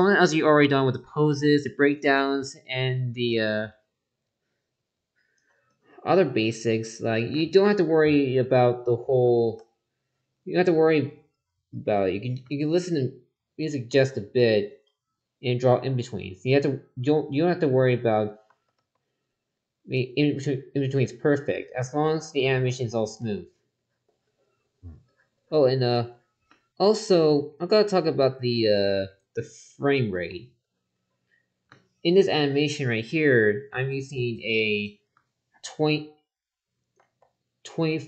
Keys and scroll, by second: 9.3 ctrl+z, 13.8 ctrl+z, 18.4 ctrl+z, 22.2 ctrl+z, 24.9 ctrl+z, 30.1 ctrl+z, 37.0 ctrl+z.